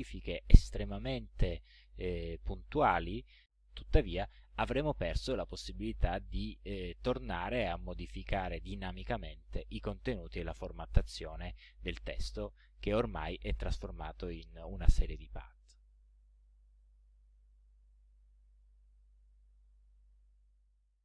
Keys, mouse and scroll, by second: 17.5-18.1 ctrl+scroll down 2, 18.9 ctrl+scroll down 2, 20.2 ctrl+middle click, 20.5 ctrl+click, 20.8 middle click.